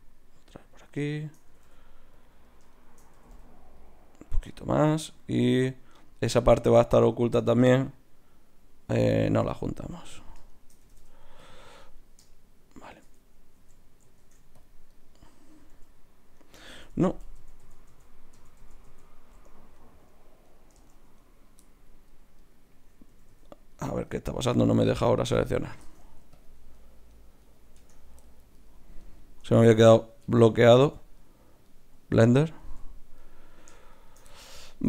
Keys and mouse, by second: 1.5 g, 3.1 g, 9.2 g, 10.8 g, 13.5 ctrl+x, 14.2 ctrl+Tab, 15.8 g, 16.7 ctrl+z, 16.9 ctrl+z, 17.3 ctrl+z, 17.6 ctrl+z, 17.9 ctrl+z, 18.3 ctrl+z, 18.6 ctrl+z, 18.8 ctrl+z, 19.7-23.3 middle drag, 23.1 a, 23.3 a, 24.7 Tab, 25.8 ctrl+Tab, 27.7 Tab, 29.4 Tab, 30.2 Tab, 30.8 z, 32.1 Tab, 32.6 z.